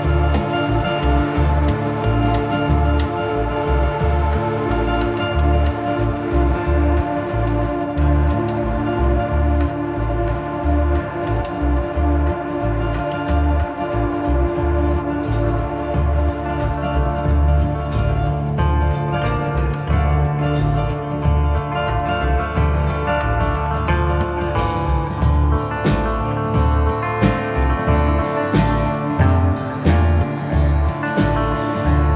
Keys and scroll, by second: 1.3 F3, 2.0 Escape, 5.2 ctrl+s.